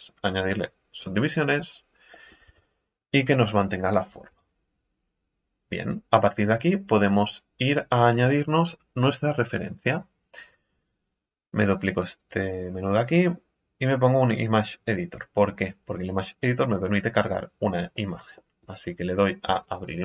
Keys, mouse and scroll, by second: 0.0-2.1 drag, 2.1 middle click, 2.5 Tab, 3.4-3.8 scroll up 3, 3.8 middle click, 4.3 Tab, 4.6 scroll down 4, 10.4-15.2 drag, 16.5-17.7 drag, 17.9-19.5 middle drag, 19.5-20.0 drag.